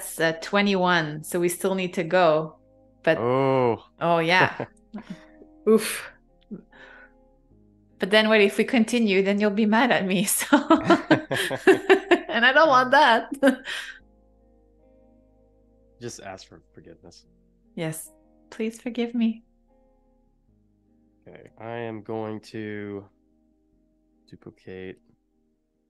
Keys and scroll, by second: 12.4 v, 13.4 super+-, 14.3 space, 18.3 alt+super+2, 21.5 BackSpace, 22.0 shift+o, 22.8 BackSpace.